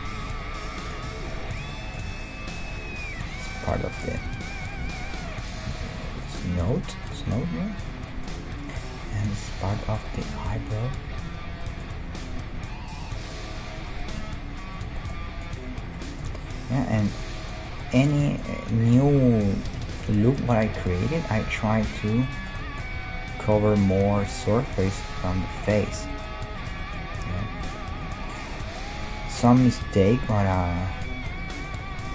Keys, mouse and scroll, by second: 0.9-3.0 right drag, 2.1 g, 4.2 g, 5.7 g, 6.2-7.3 right drag, 6.4 g, 7.3-24.3 middle drag, 7.4 g, 10.3 g, 12.0 g, 14.2 g, 15.4-18.7 right drag, 21.4 g, 22.9 g, 23.9-28.6 right drag, 24.3 g, 25.4 g, 25.8-28.6 middle drag, 29.7 g.